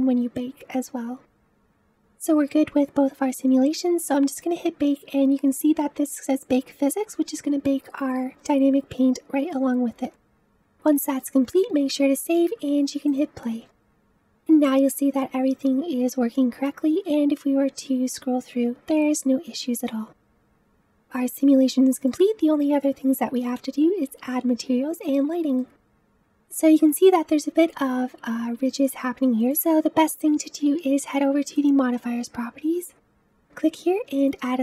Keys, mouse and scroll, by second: 10.0 ctrl+s, 11.2-12.3 middle drag, 12.3 space, 13.0 click, 13.8-16.3 middle drag, 16.3 space, 17.4-20.3 drag, 21.1-21.6 scroll up 1, 21.6-24.5 middle drag, 25.4-26.0 middle drag, 26.0-27.7 scroll up 3, 27.7-29.3 scroll down 1, 29.3-30.8 scroll up 2, 31.5 click, 33.0-34.6 drag.